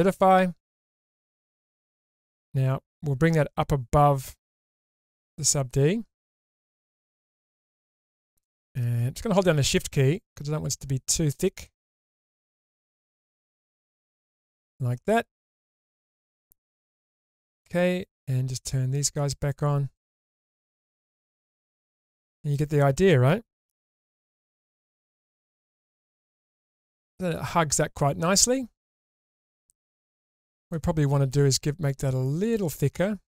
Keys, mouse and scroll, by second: 4.4-5.5 drag, 6.6 scroll up 2, 6.9-8.0 middle drag, 9.8-13.4 shift+drag, 13.9-16.2 middle drag, 17.6 click, 19.0 click, 19.4 click, 20.0 click, 20.6-22.6 middle drag, 23.8 Tab, 24.4 Tab, 25.2 shift+space, 25.7-26.0 scroll down 2, 26.0 click, 26.6 scroll up 1, 26.8-30.0 middle drag, 30.2-30.7 scroll up 1, 30.7-31.4 middle drag, 30.7-31.1 scroll up 1, 32.4 click.